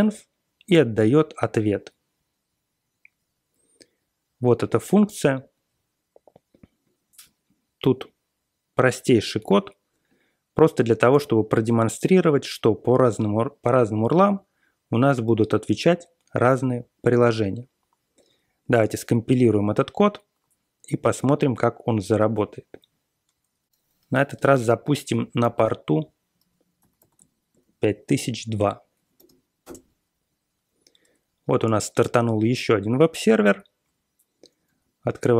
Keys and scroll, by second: 25.4 ctrl+r, 26.5-29.2 typing, 29.6 Return, 31.6 typing, 34.6 super+Tab.